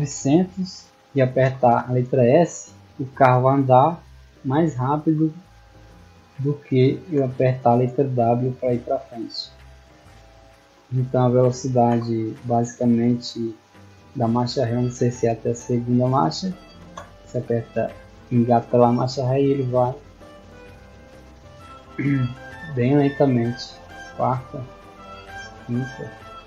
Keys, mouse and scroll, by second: 2.5 s, 9.1 click, 10.3 click, 17.2 s.